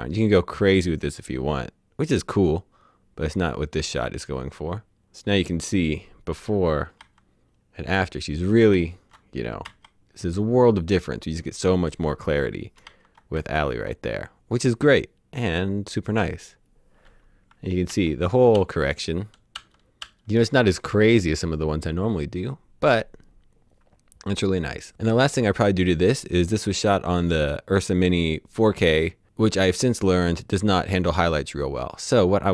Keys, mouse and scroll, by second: 5.8 click, 7.1 ctrl+z, 8.7 ctrl+shift+z, 8.8 ctrl+shift+z, 12.8 ctrl+shift+z, 12.9 ctrl+shift+z, 14.6 typing, 17.5 alt+Num_Lock, 17.5-20.1 typing.